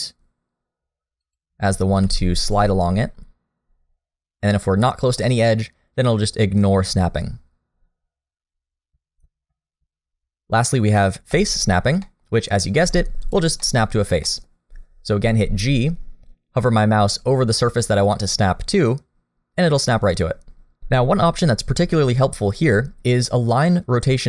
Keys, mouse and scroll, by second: 2.0 g, 9.8 click, 12.0 middle click, 12.8 g, 13.6 middle click, 14.2 middle click, 15.4 g.